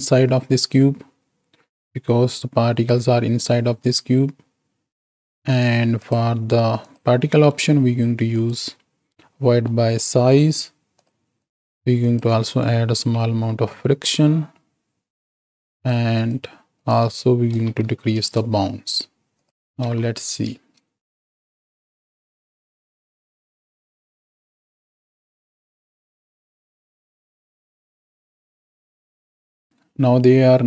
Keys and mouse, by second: 5.9 click, 6.8 click, 7.3 middle click, 8.3 click, 9.6 middle drag, 10.9 click, 11.3 click, 11.9-15.4 drag, 15.7 click, 16.1 click, 16.6-18.2 drag, 19.3 click, 19.6 shift+Right, 19.8 shift+Left, 20.5 space, 26.8-29.3 drag, 29.7 space.